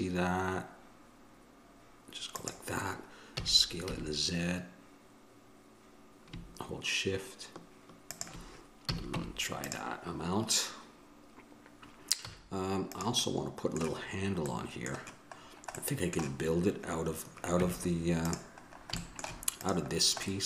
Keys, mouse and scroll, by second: 9.1 a, 9.4 Tab, 12.4 z, 17.8 Tab, 19.8-20.4 drag.